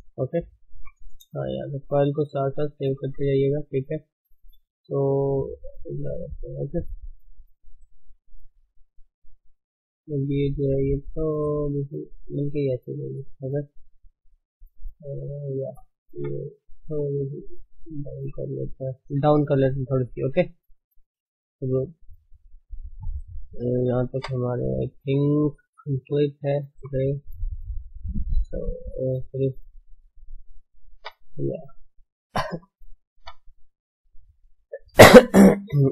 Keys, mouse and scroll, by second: 0.6 KP_1, 1.1 scroll up 1, 1.2 scroll down 3, 1.4-2.1 scroll up 3, 1.6 shift+middle click, 2.6 ctrl+shift+s, 6.2-7.2 shift+middle drag, 6.5-6.9 scroll up 3, 7.2 Tab, 7.4 scroll, 9.9 click, 13.1 middle click, 15.1-16.2 middle drag, 19.5-20.1 scroll down 3, 20.1 shift+middle click, 20.6 Tab, 21.8 Tab, 22.2 Tab, 23.4 scroll down 1, 23.7-24.2 shift+middle drag, 24.2 Tab, 24.4 scroll down 1, 24.5-26.9 middle drag, 26.9 KP_1, 27.1 scroll up 1, 27.4-27.7 scroll down 1, 27.7 shift+middle click, 27.9-28.9 scroll up 4, 28.2 shift+middle click, 28.9 Tab, 29.4 shift+middle click, 29.9 scroll up 1, 30.1 Tab, 30.6 shift+middle click, 31.1 Tab, 32.4 alt+shift+click, 33.2 r.